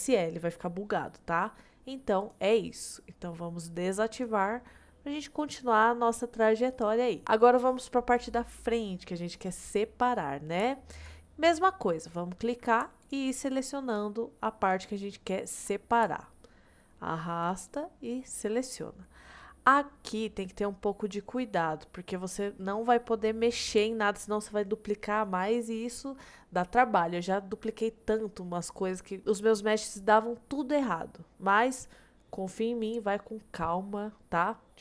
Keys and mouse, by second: 2.4-4.8 drag, 4.8-6.7 middle drag, 10.8 shift+middle click, 12.1 click, 16.3 shift+middle click, 17.5 shift+click, 20.0 middle click, 21.4 middle click.